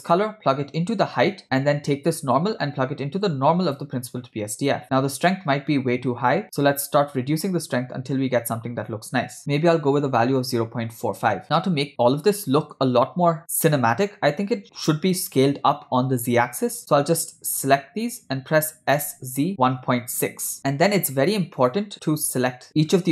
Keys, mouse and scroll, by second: 0.2-1.4 drag, 1.4 middle click, 2.4-4.0 drag, 6.8-11.4 drag, 11.4-12.8 middle drag, 11.4 scroll down 2, 17.5 shift+click, 19.0 s, 21.6 click.